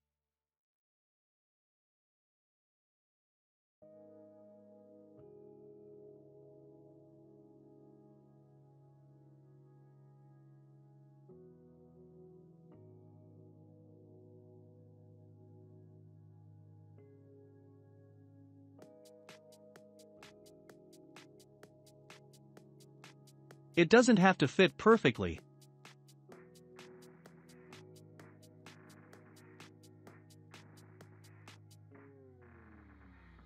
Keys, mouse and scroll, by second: 0.2 click, 0.9-2.1 middle drag, 5.8-7.3 shift+middle drag, 7.3-8.1 scroll up 5, 8.1-9.2 middle drag, 9.2 click, 12.5-12.8 scroll up 4, 12.9-13.4 middle drag, 13.4 scroll, 13.4-13.9 scroll up 6, 14.7-16.1 middle drag, 14.7 scroll up 1, 16.0-17.3 scroll down 11, 17.3-18.8 shift+middle drag, 18.8-19.8 drag, 19.8-20.8 middle drag, 20.8 click, 23.8-27.4 middle drag, 27.4-27.8 scroll up 3, 27.8-29.0 shift+middle drag, 29.0 Tab, 31.6-33.4 drag.